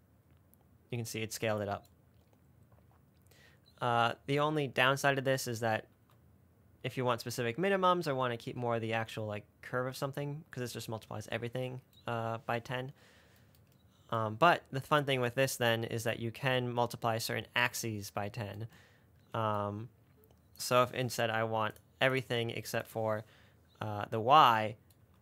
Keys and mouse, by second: 4.7 space, 6.2 space, 10.0 space, 16.5-18.1 drag, 20.8-22.1 drag, 22.4 click.